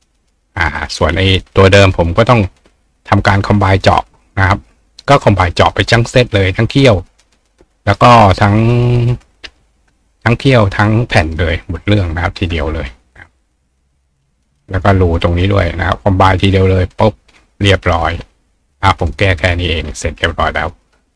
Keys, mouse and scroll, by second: 0.8 click, 3.2 click, 4.2 click, 5.4 click, 6.1 click, 6.7 click, 8.6 click, 10.6-11.9 drag, 13.2-14.6 drag, 16.8 click, 17.9 click, 19.0 click, 19.4 click, 19.4 right click.